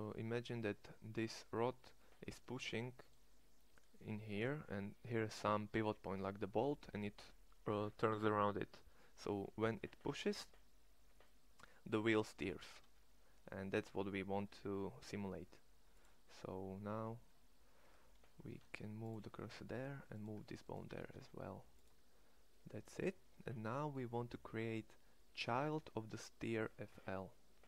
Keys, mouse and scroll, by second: 17.9 Tab, 18.3 shift+s, 19.5 Tab, 20.2 Tab, 20.8 shift+s.